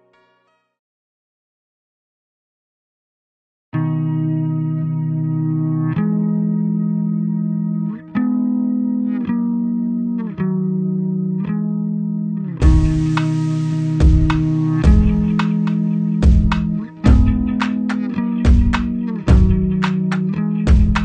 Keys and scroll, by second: 1.5 ctrl+z.